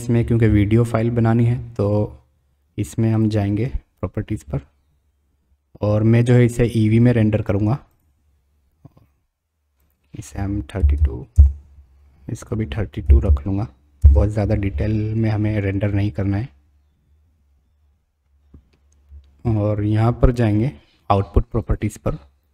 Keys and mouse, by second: 3.1 click, 6.5-8.0 drag, 9.9-12.1 drag, 11.3 KP_Decimal, 12.5-14.9 drag, 21.6 click.